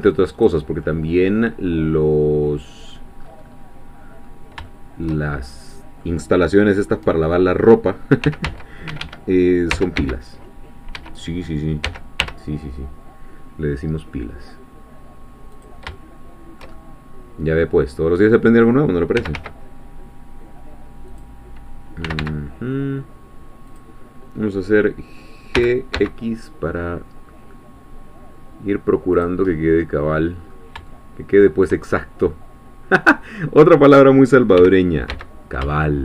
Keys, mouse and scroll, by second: 0.3 click, 0.9-3.2 middle drag, 3.2-4.0 scroll up 1, 4.0 scroll up 1, 4.2-4.6 scroll down 1, 4.7-8.2 shift+middle drag, 8.2 s, 8.5 z, 8.9 Escape, 9.7 s, 10.0 x, 10.9 Escape, 11.9 s, 12.2 y, 15.6 click, 15.9-19.2 shift+middle drag, 19.2 s, 19.3 z, 21.1 click, 22.1 s, 22.2 x, 23.7-25.5 drag, 25.5 g, 26.0 x, 29.2 click, 29.5 middle click, 30.5-30.9 scroll up 3, 30.9-33.1 shift+middle drag, 33.1-34.6 scroll up 1, 34.6 scroll up 1, 34.6 g, 35.1 x.